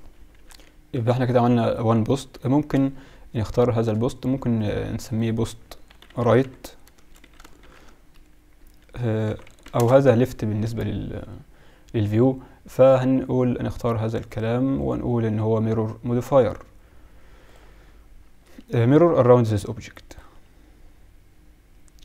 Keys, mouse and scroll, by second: 0.5 KP_Divide, 0.8-1.6 KP_Subtract, 1.9 KP_Subtract, 2.5 KP_7, 4.7-16.8 drag, 19.6-21.6 drag.